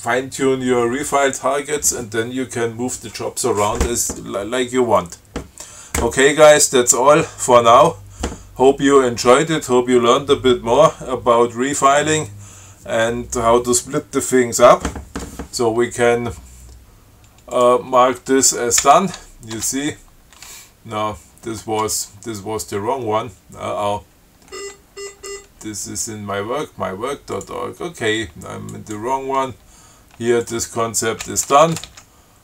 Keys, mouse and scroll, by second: 17.8 click, 19.0 ctrl+c, 19.8 Tab, 22.1 ctrl+click, 24.8 scroll up 2, 25.1-25.4 scroll down 2, 25.4 scroll up 2, 27.6 click, 29.0 click, 30.7 click, 31.5 ctrl+c.